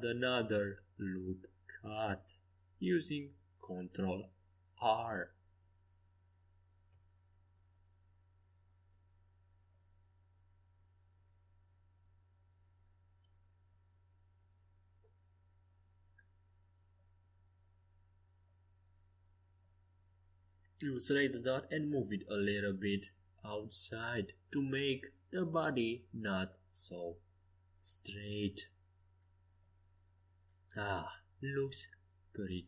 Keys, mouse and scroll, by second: 3.8 Escape, 8.8 z, 9.8-12.4 right drag, 12.4 g, 14.8 s, 16.9 s, 20.1 a, 21.9-25.9 drag, 22.7 c, 26.0 g, 28.4 a, 28.9 c, 30.4 g.